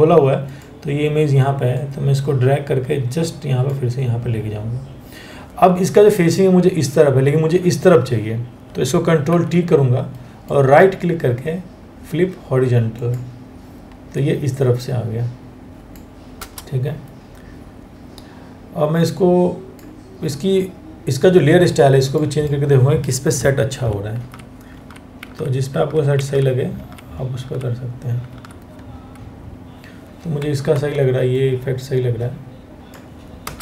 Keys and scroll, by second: 8.9 ctrl+t, 16.0 Return, 23.3 Down, 23.8 Down, 24.4 Down, 24.8 Down, 25.4 Down, 25.8 Down, 26.4 Down, 27.0 Down, 30.4 ctrl+t, 33.1 Return.